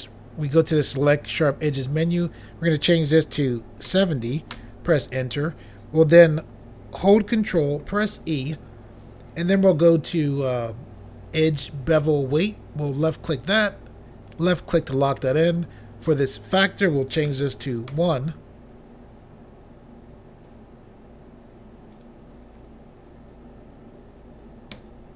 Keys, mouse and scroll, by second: 2.2 click, 3.4-3.8 typing, 4.5 Return, 7.8 ctrl+e, 12.9 click, 14.3 click, 14.4 click, 16.0 click, 17.3 1, 17.9 Return, 21.9 click, 24.7 1.